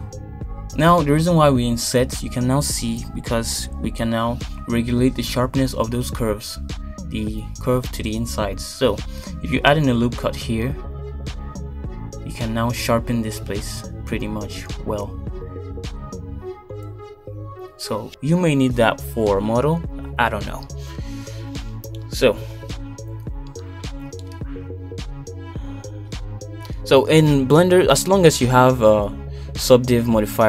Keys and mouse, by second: 0.1 shift+middle click, 13.2 ctrl+r, 18.6 Tab, 19.4-22.0 middle drag, 22.5 Tab, 23.5 middle click, 23.9 x, 26.6 KP_2, 27.1 KP_1, 29.2 click, 29.5 click.